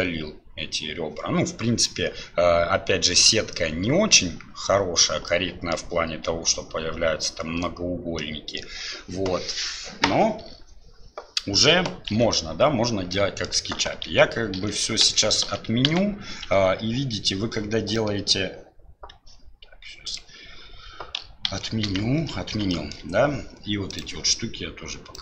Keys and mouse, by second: 5.4 middle click, 8.2 middle click, 12.1-16.4 ctrl+z, 13.1 middle click, 18.0 click, 20.2 click, 21.5 ctrl+z, 22.7 shift+click, 24.1-25.2 drag.